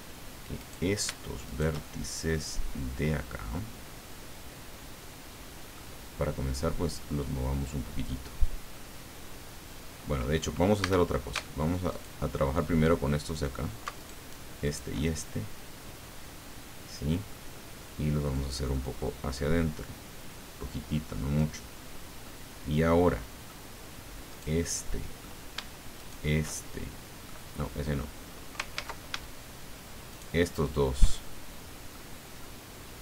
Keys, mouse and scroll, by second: 0.6 right click, 1.4 shift+right click, 1.8 shift+click, 2.7-5.3 middle drag, 5.3 right click, 10.8 a, 11.9 alt+shift+right click, 14.0 alt+shift+right click, 14.6 shift+right click, 15.1-17.5 shift+middle drag, 18.3-21.6 drag, 22.2-23.6 drag, 24.3 right click, 24.6 click, 25.1 right click, 25.9 shift+right click, 26.4 shift+right click, 28.7 ctrl+z, 30.1 shift+right click, 31.1 shift+right click, 31.3 shift+click, 31.6 right click, 32.4 right click.